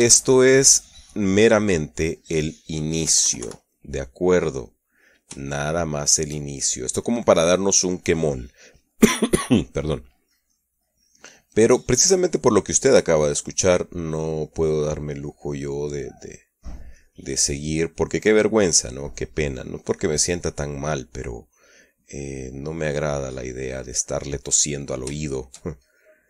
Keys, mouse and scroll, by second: 0.2-0.8 middle drag, 0.8-1.4 shift+middle drag, 1.4-1.9 shift+middle drag, 1.9-3.2 shift+middle drag, 3.8 KP_Subtract, 4.5-5.9 middle drag, 6.2-7.7 shift+middle drag, 8.0-8.6 middle drag, 11.0-14.3 drag, 14.4 middle click, 15.2-18.1 drag, 18.5-23.1 drag, 23.2-25.2 middle drag, 25.6-26.2 shift+middle drag.